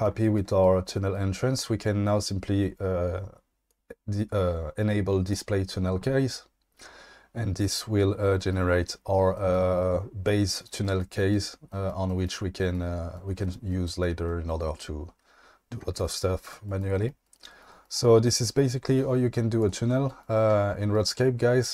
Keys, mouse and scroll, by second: 7.7 click, 9.3 shift+middle drag, 19.6 click.